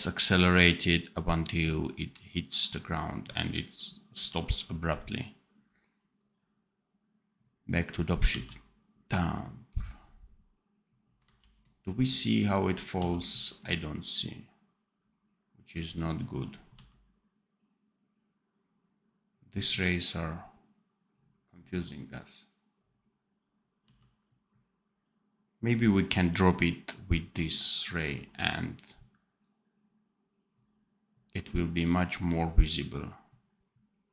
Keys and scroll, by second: 8.2 d, 11.3 ctrl+b, 12.9 d, 16.6 d, 23.7 d.